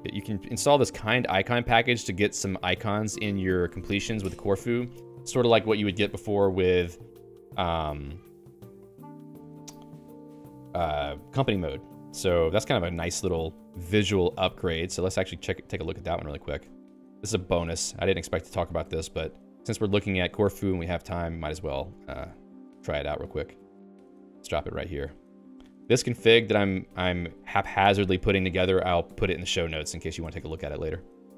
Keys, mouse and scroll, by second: 15.7 ctrl+s, 19.6 ctrl+u, 22.2 ctrl+u.